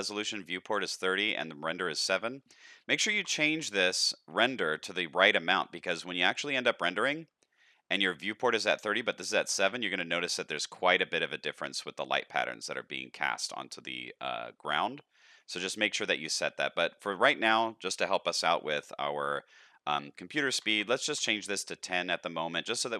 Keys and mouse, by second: 1.5-3.7 drag, 16.6-21.7 drag, 22.8 middle click.